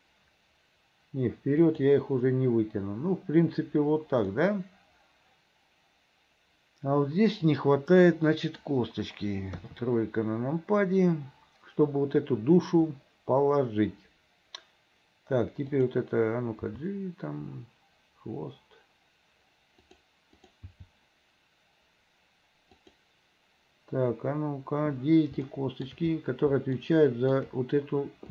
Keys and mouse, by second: 4.5 click, 5.5-8.8 middle drag, 9.7 KP_3, 15.9 click, 16.7 g, 20.4 click, 20.8 g, 25.4 shift+middle click, 25.7 shift+click, 26.9 shift+click.